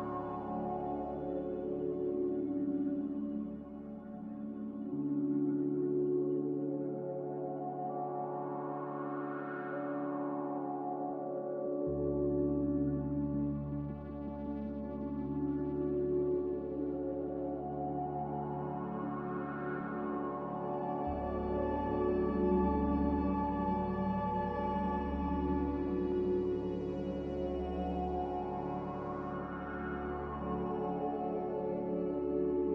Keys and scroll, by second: 3.6 h, 6.6 z, 7.3 h, 9.4-10.2 typing, 14.9-15.6 typing, 21.6-22.4 typing, 25.2 z, 26.7 1, 27.1 Return, 30.6-31.7 typing.